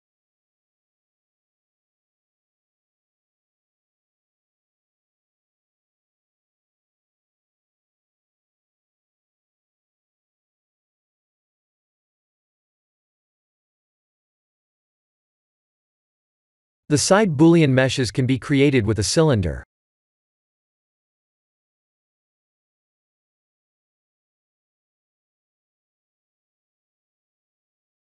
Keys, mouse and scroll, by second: 0.3 g, 5.1 shift+z, 5.5 middle click, 6.2 shift+z, 6.8 middle click, 7.2 middle click, 7.2 middle click, 7.7 middle click, 7.9 click, 8.2 middle click, 14.2 click, 14.6 middle click, 15.1 middle click, 15.5-16.2 middle click, 15.8 middle click, 15.9 middle click, 16.9 click, 17.5 shift+a, 24.1 click.